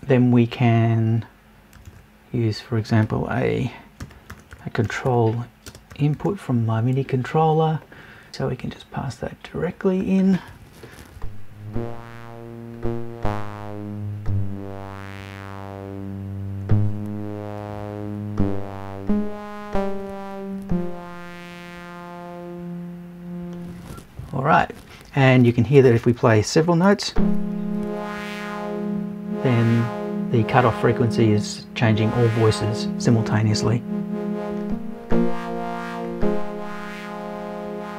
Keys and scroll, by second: 8.3 BackSpace.